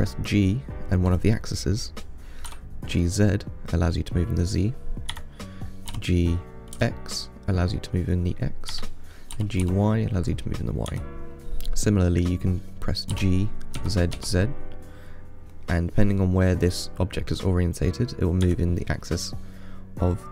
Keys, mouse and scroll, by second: 0.1 g, 6.1 g, 9.6 g, 13.4 g.